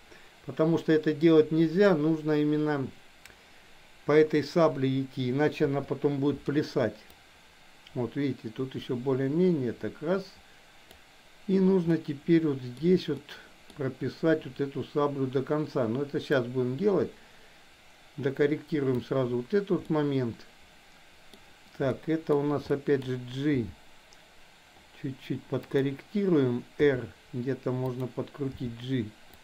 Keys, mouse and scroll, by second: 5.6 i, 7.2-11.1 drag, 11.8-12.7 middle drag, 13.1-13.6 middle drag, 16.3-19.0 drag, 20.0-21.3 middle drag, 22.0-22.3 middle drag, 22.7-23.1 middle drag, 23.6 g, 26.7 r, 28.6 g.